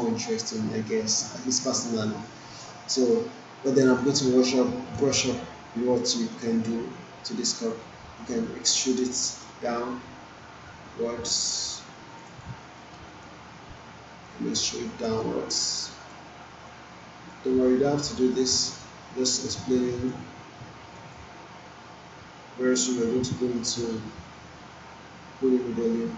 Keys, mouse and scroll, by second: 1.7-2.3 alt+click, 2.5-3.2 alt+drag, 3.9 alt+middle click, 4.5-5.1 alt+right drag, 6.1 alt+middle click, 9.4-12.2 alt+shift+drag, 12.6 alt+middle click, 12.9 alt+right click, 14.3-15.2 click, 15.2-16.1 alt+drag, 16.7-17.6 drag, 18.3 click, 18.8-19.7 alt+click, 20.1-21.0 click, 21.1-23.0 alt+drag, 23.7-26.1 drag.